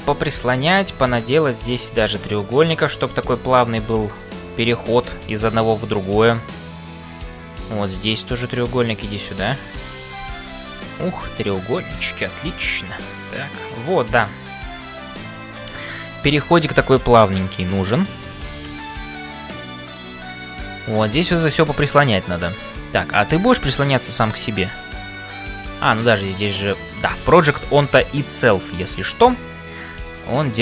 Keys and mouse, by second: 0.0-30.6 typing, 2.0 click, 2.8 shift+click, 3.5 click, 4.1 shift+click, 5.6-7.1 middle drag, 8.3 click, 8.9 middle click, 12.6-15.1 middle drag, 16.1 click, 16.7-17.8 middle drag, 20.2 middle click, 21.4 click, 22.0 middle click, 25.0 middle click, 26.4-27.5 drag, 27.9 middle click.